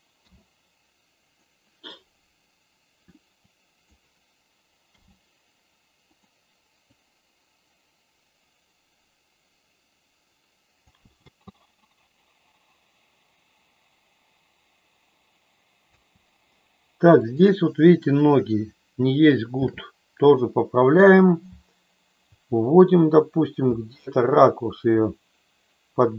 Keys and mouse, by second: 0.1 i, 3.5 click, 4.9 g, 6.1 click, 6.9-10.9 drag, 11.1 space, 16.1 space, 17.3 click, 19.5 shift+f, 21.5 Down, 23.6 Left, 24.2 Left.